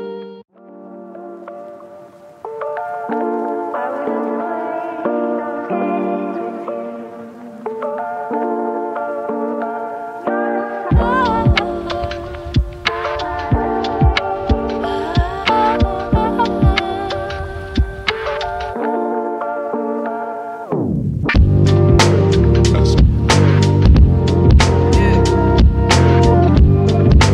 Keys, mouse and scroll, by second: 1.2 shift+right click, 2.6-3.1 scroll up 1, 3.4 click, 4.2 right click, 5.2-7.9 drag, 7.9 right click, 8.8 scroll up 1, 9.7-12.2 drag, 12.6-12.9 scroll down 1, 12.9 right click, 14.2 shift+right click, 15.5 typing, 17.0 click, 21.6 click, 24.7 typing.